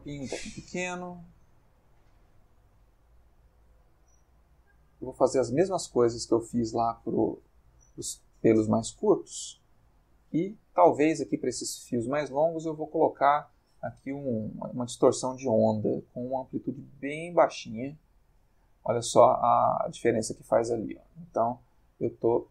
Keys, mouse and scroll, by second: 1.4 click, 1.9 middle click, 3.0-6.7 drag, 7.5 click, 11.5 click, 13.9 click, 16.0-22.5 shift+drag.